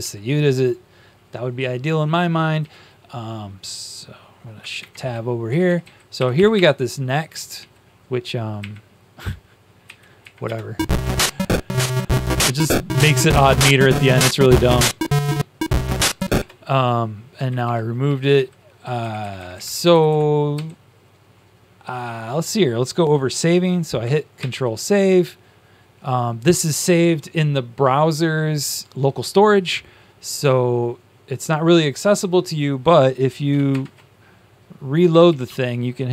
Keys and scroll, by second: 4.7 Up, 4.7 Down, 4.7 shift+Tab, 5.4 Right, 5.6 Right, 5.7 Right, 6.5 Up, 7.5 Down, 9.8 Up, 9.8 Delete, 10.4 Up, 17.5 ctrl+shift+Down, 17.9 ctrl+shift+Down, 18.2 ctrl+shift+Down, 19.3 Up, 19.6 Up, 19.6 Left, 19.8 Left, 20.0 Left, 20.5 Down, 24.3 ctrl+s, 33.6 ctrl+shift+\, 35.0 Down, 35.4 Down.